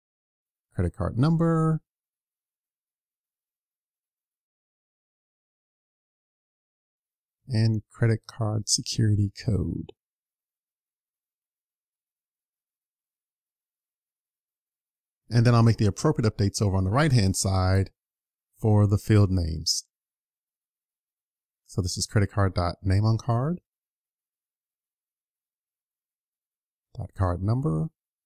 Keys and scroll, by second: 11.1 super+s.